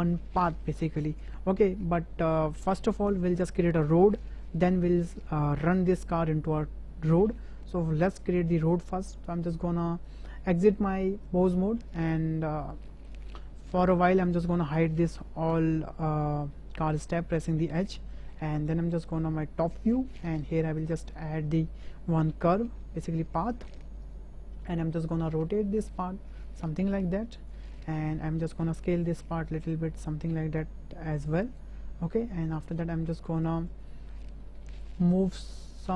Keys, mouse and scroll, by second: 10.0-11.5 drag, 12.8 middle drag, 13.9-14.3 drag, 17.7 h, 18.6 `, 20.1 shift+drag, 20.7 shift+a, 24.7 click, 26.0-27.5 drag, 28.8 s, 31.9 Tab, 33.5 click, 34.0 shift+click, 34.8 g.